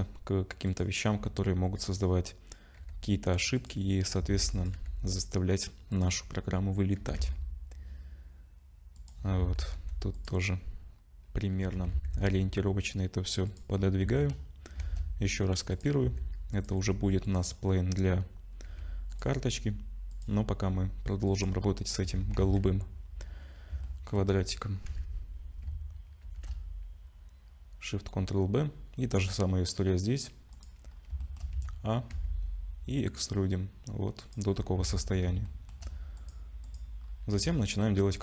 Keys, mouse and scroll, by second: 1.1 g, 4.2 s, 4.7 g, 6.2-6.6 scroll up 3, 7.0 g, 9.2 scroll down 4, 9.4 Tab, 9.7 2, 10.1 click, 11.0-11.5 scroll up 2, 11.5 g, 13.7-14.4 scroll down 6, 14.0 Tab, 14.8 shift+d, 16.0 s, 16.8 g, 17.5-17.9 scroll up 4, 18.6 g, 20.1 click, 20.4 scroll up 2, 21.3 click, 22.0 Tab, 22.4 a, 23.1-23.6 scroll up 2, 23.8 shift+middle click, 24.5-24.9 scroll down 2, 24.9 a, 26.2 ctrl+shift+b, 30.9 scroll up 2, 31.2 shift+middle click, 31.5 a, 32.1 e, 34.5 scroll down 4, 34.8 Tab, 35.4 shift+middle click, 36.2 click, 36.6 click, 37.0-37.6 scroll up 3, 37.6 shift+middle click.